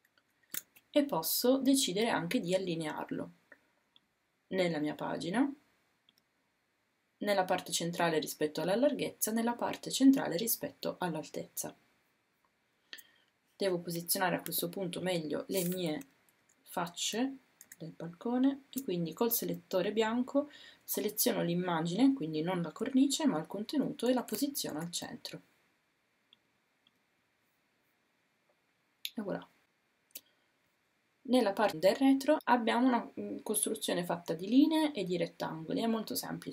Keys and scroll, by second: 14.5 a, 23.7 Down, 24.1 Down.